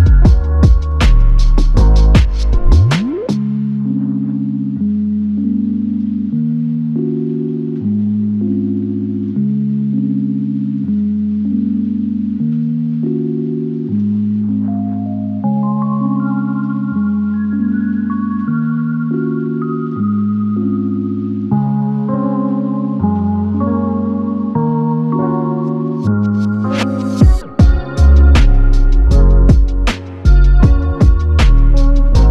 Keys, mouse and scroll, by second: 0.7 alt+click, 2.4 alt+shift+click, 3.4 typing, 6.1 double click, 11.1 double click, 19.5 alt+shift+click, 20.1 alt+click, 25.4 double click, 26.4 alt+click, 28.5 double click.